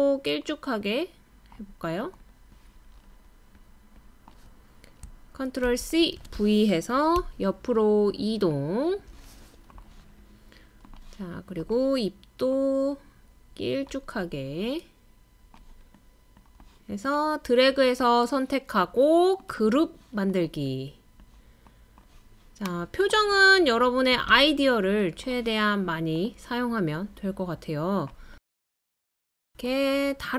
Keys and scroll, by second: 5.7 super+c, 6.2 super+v, 7.2 Right, 7.7 Right, 7.8 Right, 7.9 space, 7.9 space, 8.0 space.